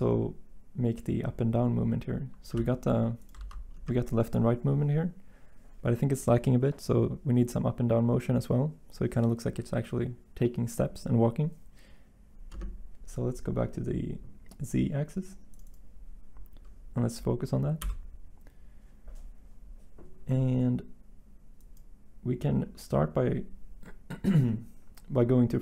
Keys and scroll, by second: 2.5 g, 3.3 ctrl+z, 17.8 Delete.